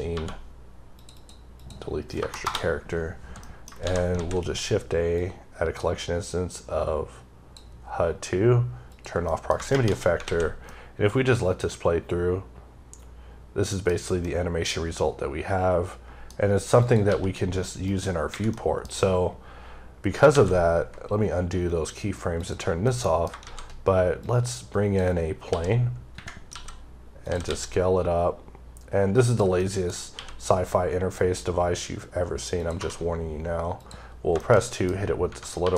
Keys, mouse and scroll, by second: 0.8 click, 1.0 double click, 1.4 click, 2.0 BackSpace, 3.3 middle click, 3.7 typing, 5.0 click, 8.8 click, 9.1 middle click, 10.6 middle click, 14.1 middle click, 16.2-16.7 scroll down 3, 16.9 g, 17.8 right click, 18.2 ⦸, 18.4 middle click, 18.8 scroll up 2, 20.2 ctrl+z, 22.3 click, 22.8 middle click, 23.3 shift+a, 24.1 click, 25.4 s, 27.1 click, 29.1 click, 29.4 middle click, 29.7 scroll, 29.8 scroll up 3, 30.0 q, 32.5 click, 32.7 2, 33.7 click, 33.9 scroll down 3, 34.3 shift+middle click, 34.8 scroll up 2, 35.1 Right, 35.3 scroll down 1, 35.5 2.